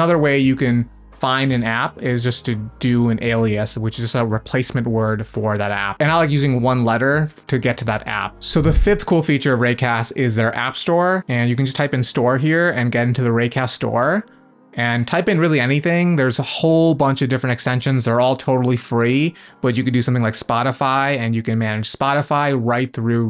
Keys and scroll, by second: 11.5 s.